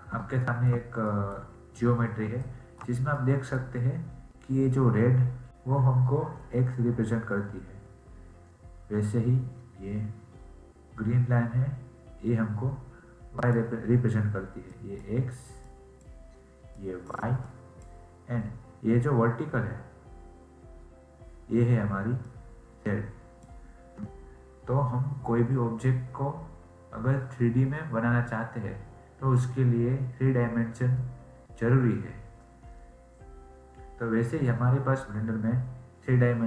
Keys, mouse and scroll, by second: 0.4-5.5 shift+middle drag, 13.3-20.4 drag, 22.2-25.3 drag.